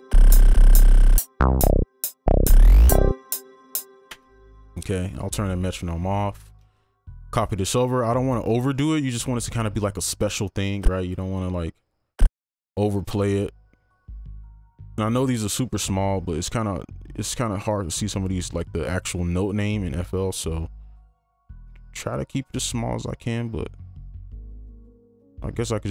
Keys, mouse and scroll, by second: 4.1 space, 6.7 ctrl+click, 9.1 right click, 12.5 ctrl+click, 15.6-20.4 scroll down 1, 25.6-25.9 scroll up 1.